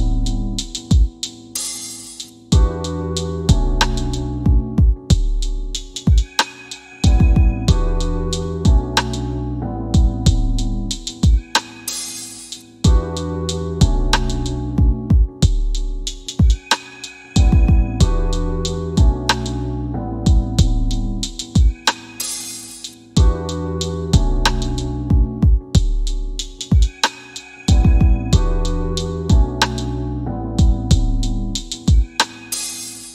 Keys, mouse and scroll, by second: 0.4 middle click, 1.0 scroll up 1, 2.6 scroll down 1, 3.4 c, 4.4 f, 9.0 scroll up 1, 11.7 scroll down 1, 13.0 scroll up 1, 13.8 scroll down 1.